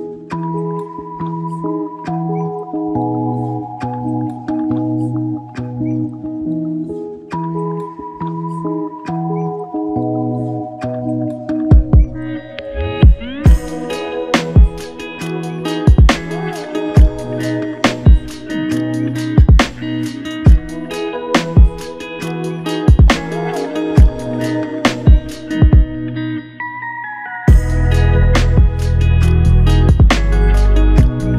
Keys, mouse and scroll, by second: 2.2 alt+click, 4.1 ctrl+alt+click, 5.4 alt+shift+click, 6.1 ctrl+alt+click, 7.7 alt+click, 12.7 ctrl+click, 18.0 ctrl+click, 18.1 shift+click, 19.0 shift+click, 19.9 shift+click, 22.7 f, 24.4 alt+click, 25.6 ctrl+click, 25.9 ctrl+double click, 26.3 ctrl+click.